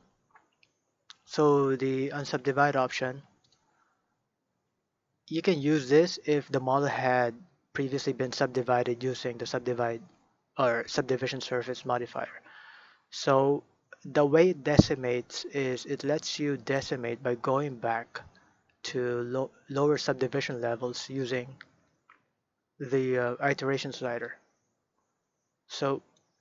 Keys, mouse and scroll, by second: 2.6 shift+middle click, 3.4 click, 5.4 click, 13.5 scroll up 1, 14.1-17.3 shift+middle drag, 24.2-26.4 drag.